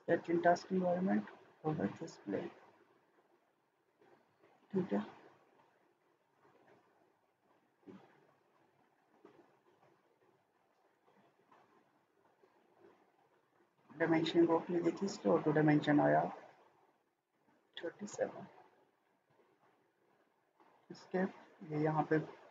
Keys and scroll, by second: 11.2 Escape, 16.3-17.8 typing, 18.1 Return, 19.6 Escape.